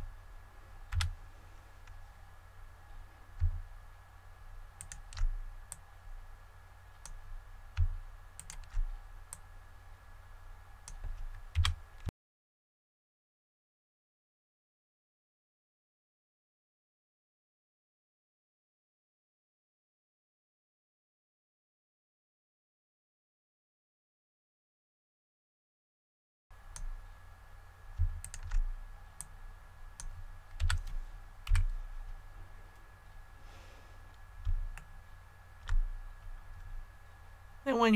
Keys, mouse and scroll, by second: 0.8 a, 4.7 alt+right click, 5.6 click, 8.3 alt+right click, 9.2-11.3 drag, 11.5 a, 12.0 Tab, 12.3 click, 12.4 middle click, 13.0 Tab, 13.2 click, 13.3 right click, 13.4 click, 13.7 right click, 13.7 click, 14.0 click, 14.1 right click, 14.2 shift+right click, 14.3 KP_1, 14.5 e, 14.8 click, 14.9 s, 15.3 scroll up 1, 15.4 click, 15.6 middle click, 15.8 a, 16.2 click, 16.6 click, 16.9 a, 17.1 middle click, 17.4 ctrl+r, 17.5 scroll up 1, 17.6 click, 17.8 Tab, 17.9 click, 17.9 middle click, 18.1 a, 18.3 right click, 18.4 click, 18.6 right click, 18.7 click, 18.9 Tab, 19.0 click, 19.0 right click, 19.2 KP_1, 19.4 e, 19.7 click, 20.1 middle click, 20.3 scroll up 1, 20.6 click, 20.8 a, 21.1 alt+right click, 21.2 click, 21.4 alt+right click, 21.5 click, 21.6 a, 21.8 middle click, 22.8 Tab, 22.9 click, 23.0 right click, 23.1 click, 23.3 right click, 23.4 click, 23.8 Tab, 23.9 click, 24.0 right click, 24.1 shift+right click, 24.2 KP_1, 24.4 e, 24.7 click, 25.1 scroll up 1, 25.3 click, 25.4 middle click, 25.6 a, 25.9 alt+right click, 26.0 click, 26.2 alt+right click, 26.3-27.5 drag, 28.2 alt+right click, 29.1 click, 30.6 a, 31.4 KP_1, 33.0-34.4 scroll down 1, 34.7 shift+middle click, 37.1 KP_1.